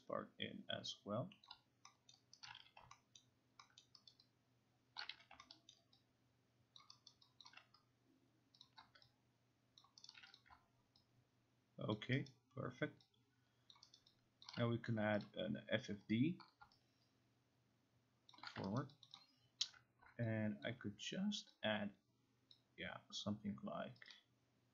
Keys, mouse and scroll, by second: 1.5 click, 2.1 alt+middle click, 2.5 alt+right click, 2.6 q, 3.2 alt+middle click, 3.8 alt+middle click, 4.1 alt+right click, 5.0 alt+click, 5.1 q, 5.8-6.8 alt+scroll, 6.8 alt+click, 7.1 alt+right click, 7.9 alt+click, 8.6 click, 9.8 alt+click, 10.1 alt+right click, 10.4 click, 12.0 alt+click, 12.3 alt+right click, 13.7 alt+click, 14.0 alt+right click, 14.5 alt+click, 15.2 click, 16.6 click, 17.1 click, 18.3 shift+click, 18.8 alt+right click, 19.0 alt+click, 19.2 alt+click, 20.7 alt+click, 22.6 click, 24.1 click.